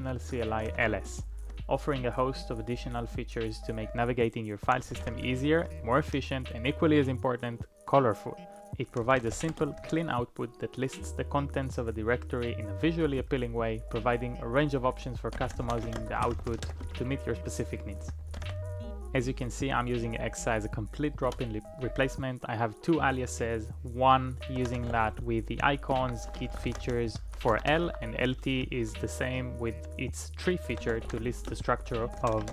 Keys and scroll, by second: 0.7 alt+i, 4.4-7.0 typing, 8.7-10.0 typing, 13.0 typing, 14.6-18.9 typing, 21.3 typing, 24.3-27.8 typing, 30.5-32.5 typing.